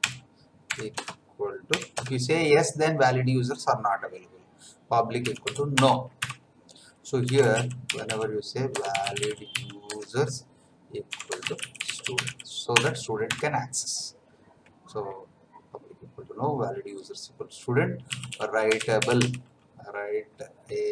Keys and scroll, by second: 0.0-1.9 typing, 5.0-5.9 typing, 6.1 Tab, 7.0-12.7 typing, 12.7 Return, 13.3 Tab, 17.8-19.7 typing.